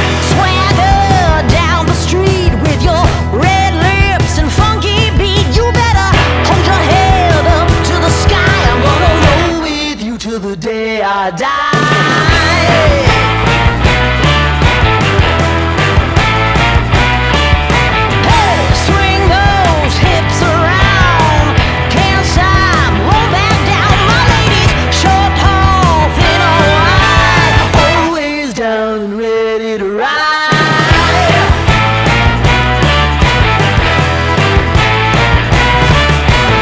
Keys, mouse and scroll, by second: 2.7 click, 4.5 click, 4.6-8.9 shift+drag, 11.9 click, 14.4-19.5 drag, 23.6-36.6 drag.